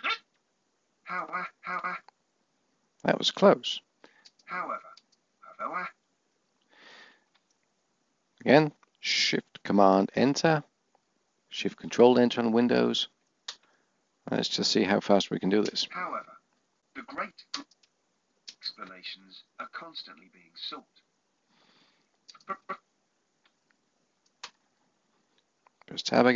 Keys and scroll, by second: 8.0 shift+super+Return, 11.9 ctrl+shift+Return, 18.0 Tab.